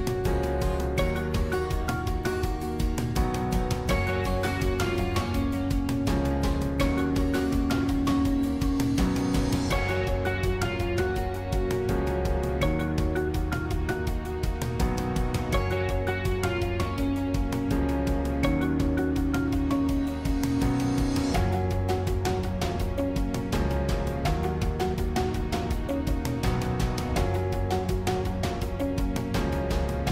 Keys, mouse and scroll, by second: 8.2 click, 13.5 g, 16.0 click, 16.7-18.0 middle drag, 18.0-18.5 scroll up 1, 18.6-20.6 middle drag, 20.6 c, 29.4 click.